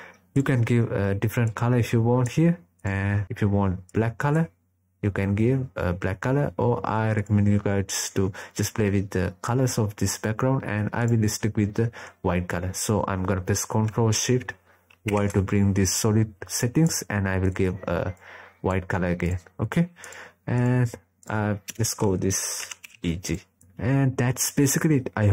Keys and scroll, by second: 13.4 ctrl+shift+y.